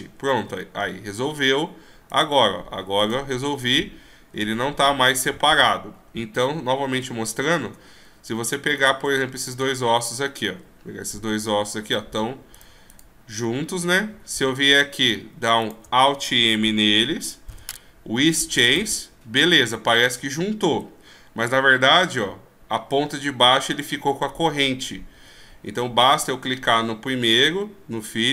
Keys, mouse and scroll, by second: 0.7 g, 3.3 right click, 3.9 right click, 4.6 g, 6.9-7.8 scroll down 5, 9.0 right click, 9.6 shift+right click, 10.2 right click, 11.3 g, 12.8 right click, 13.7 g, 15.0 right click, 15.9 shift+right click, 17.7 alt+m, 20.2 right click, 21.0 g, 26.3 right click.